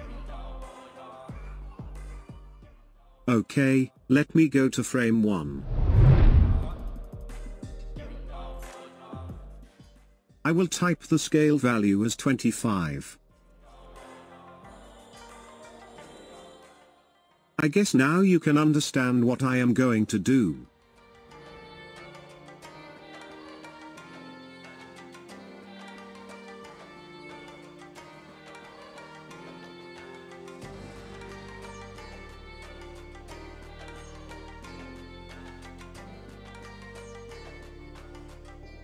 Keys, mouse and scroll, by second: 2.3 space, 4.8 click, 6.3-12.7 drag, 12.9 space, 16.1 space, 17.4 click, 17.8 space, 19.9 space, 21.3-24.3 drag, 24.5 space, 28.2 space, 31.2-34.3 drag, 38.6-38.8 drag.